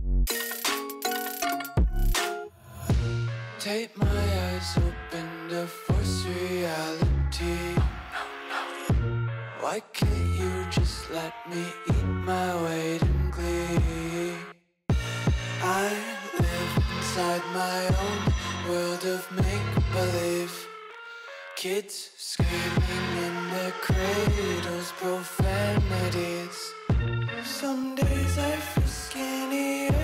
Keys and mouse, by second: 0.3 i, 2.3 KP_1, 2.8 shift+middle click, 3.2 e, 7.2 z, 7.3 z, 7.5 Tab, 7.6-8.0 middle drag, 8.1 Tab, 8.7 ctrl+KP_Add, 9.2 s, 11.2 KP_1, 12.0 shift+middle click, 12.3 s, 14.8 Tab, 15.2 Tab, 15.8 shift+click, 16.1 ctrl+r, 19.3 3, 20.2-21.1 drag, 23.1 shift+click, 24.3 Tab, 25.1 middle click, 25.9 w, 27.5 KP_1, 28.0 click, 28.3 Tab, 28.7 3, 29.5 x.